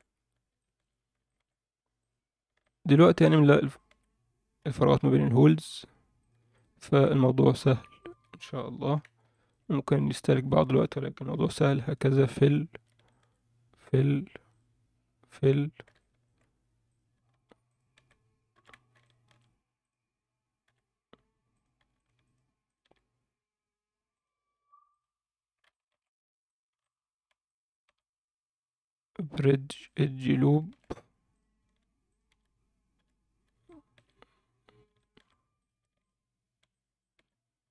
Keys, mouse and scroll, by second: 0.0 scroll up 1, 0.5 alt+shift+middle click, 1.0 scroll up 1, 1.3 alt+shift+middle click, 2.0 click, 2.6 shift+click, 3.1 shift+click, 3.7 shift+click, 4.6 f, 6.2 click, 6.5 shift+click, 7.3 2, 7.5 click, 8.8 f, 9.3 alt+shift+middle click, 10.1 click, 10.5 shift+click, 11.3 f, 11.7 shift+middle click, 12.5 click, 13.1 shift+click, 13.9 f, 14.5 click, 15.3 f, 16.0 alt+shift+middle click, 16.9 click, 17.7 shift+click, 18.5 f, 19.0 shift+middle click, 19.8 click, 20.7 f, 21.5 click, 22.0 shift+click, 22.2 shift+click, 22.7 shift+click, 24.1 click, 25.7 alt+shift+middle click, 26.5 click, 26.8 shift+click, 27.5 shift+click, 27.7 shift+click, 29.3 click, 30.5 alt+shift+middle click, 31.3 click, 32.1 shift+click, 33.0 f, 33.3 scroll down 1, 33.6 alt+shift+middle click, 35.0 alt+shift+middle click, 35.6 click, 36.0 shift+click, 36.7 shift+click, 37.0 shift+click.